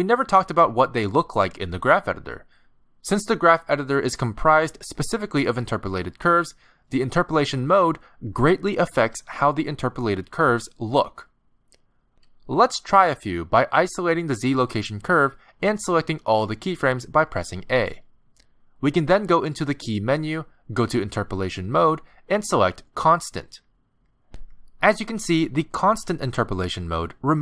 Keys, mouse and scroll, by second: 1.4 click, 14.4 click, 15.5 shift+h, 17.3 a, 19.9 click.